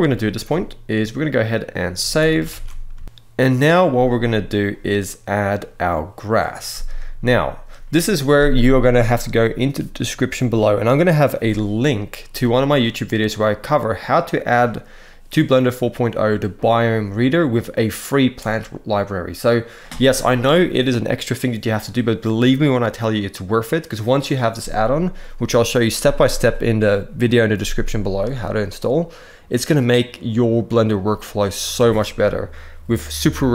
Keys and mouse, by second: 1.8 ctrl+s, 2.1 ctrl+s, 2.3 ctrl+s, 2.8 shift+middle click, 2.8 shift+click, 3.0 shift+middle click, 18.1 n.